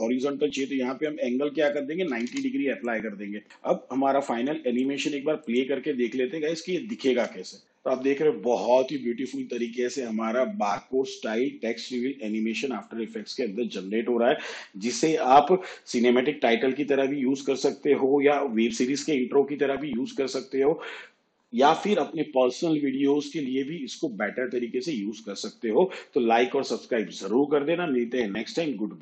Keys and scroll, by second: 2.2 9, 3.4 n, 7.2 space.